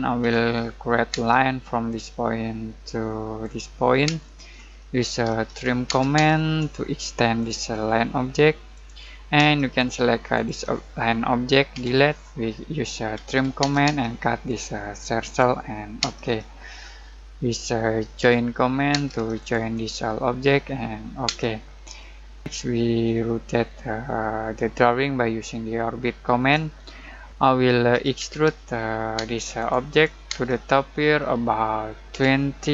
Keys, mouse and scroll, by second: 0.2 l, 1.1 space, 1.9 click, 4.0-5.9 typing, 4.5-5.2 scroll up 1, 7.4 shift+click, 9.4 space, 9.7 click, 11.7 Delete, 12.9-13.7 typing, 14.4 click, 16.0 space, 16.2-16.8 scroll down 1, 16.8-18.2 middle drag, 18.2 j, 18.9 space, 19.4 click, 21.2 space, 21.7 scroll down 1, 21.9 middle click, 23.1-26.8 shift+middle drag, 26.8-27.3 scroll up 1, 27.3 ctrl+z, 27.7-29.1 typing, 29.5 click, 30.3 space, 31.9-32.7 typing.